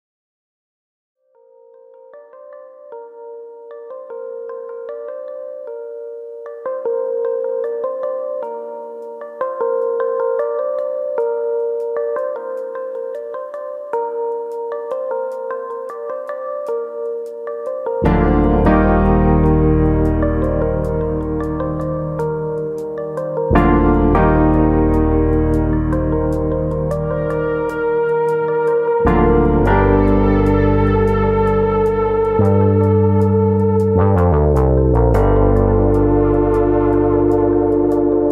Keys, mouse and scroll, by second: 0.1 middle click, 0.3 shift+middle click, 0.3 scroll up 3, 0.6 middle click, 1.0 middle click, 1.7 middle click, 2.6 3, 2.9 click, 3.7 x, 5.3 middle click, 6.2 1, 6.7 click, 7.0 shift+click, 7.5 middle click, 8.3 shift+middle click, 8.7 click, 9.0 shift+click, 10.3 m, 11.4 middle click, 11.9 click, 12.2 shift+click, 13.0 m, 13.6 middle click, 14.4 scroll up 2, 15.0 click, 15.4 shift+click, 16.1 m, 16.7 middle click, 17.2 click, 17.5 shift+click, 18.3 m, 19.1 middle click, 19.5 middle click, 20.5 3, 20.8 click, 21.4 x, 22.7 middle click, 23.1 1, 23.6 click, 24.0 shift+click, 24.8 m, 25.4 middle click, 26.2 click, 26.5 shift+click, 27.2 click, 27.5 shift+click, 28.3 m, 28.9 middle click, 29.6 middle click, 30.4 click, 30.8 shift+click, 31.7 m, 32.4 middle click, 33.5-34.1 scroll up 2, 33.8 middle click, 34.8 click, 35.5 click, 36.2 shift+click, 36.3 shift+click, 37.0 m.